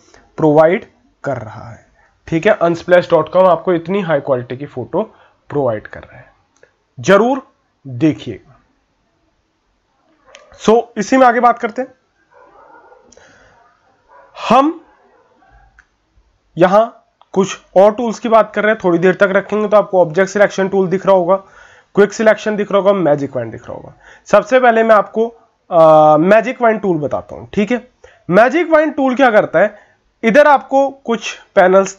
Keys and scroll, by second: 0.6 ctrl+-, 12.0 ctrl+-, 12.6 ctrl+-.